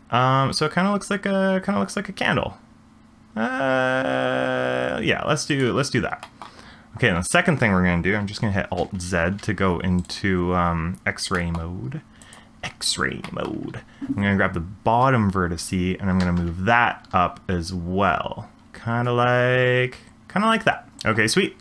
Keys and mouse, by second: 6.2 shift+click, 8.8 alt+z, 11.3 shift+middle click, 13.2 shift+middle click, 16.2 g.